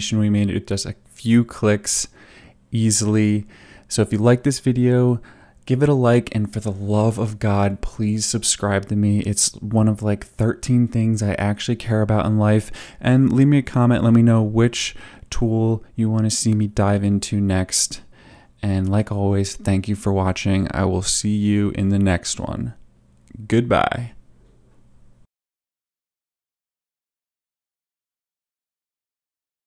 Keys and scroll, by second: 4.9 u, 26.2 space.